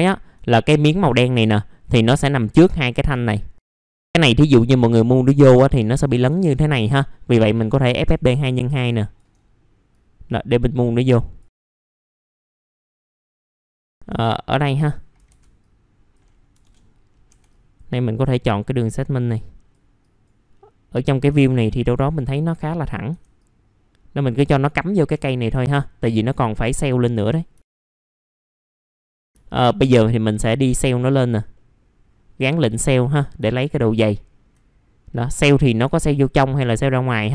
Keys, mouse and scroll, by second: 1.1-2.6 scroll up 1, 2.9 middle click, 3.2-3.6 scroll up 1, 3.6 click, 3.8 alt+middle click, 4.2 alt+middle click, 4.9 click, 7.4 click, 8.9 ctrl+click, 9.3 scroll up 1, 9.9 click, 11.6 alt+middle click, 11.8 middle click, 12.7 click, 13.5 F3, 13.6 middle click, 13.9-14.4 scroll up 2, 14.4 click, 15.6 click, 16.6 BackSpace, 17.5-22.4 drag, 24.4 click, 24.6 alt+middle click, 25.1 F3, 25.6 alt+middle click, 26.1 middle click, 26.2 scroll down 1, 26.5 alt+middle click, 27.5 alt+middle click, 28.2 middle click, 28.3 scroll down 1, 28.3 alt+middle click, 28.7 alt+middle click, 29.2 scroll up 1, 29.4 alt+middle click, 30.6 click, 31.5 middle click, 32.4 click, 33.5 alt+middle click, 35.7-37.3 drag.